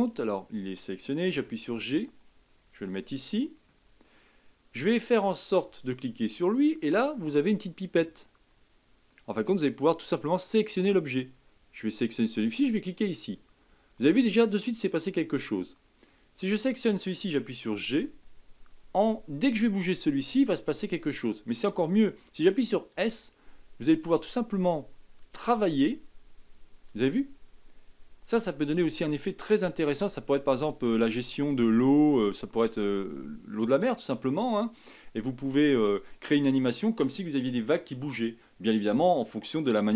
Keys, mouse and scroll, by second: 5.8 click, 10.4 click, 14.5-16.1 middle drag, 16.1 click, 17.7 g.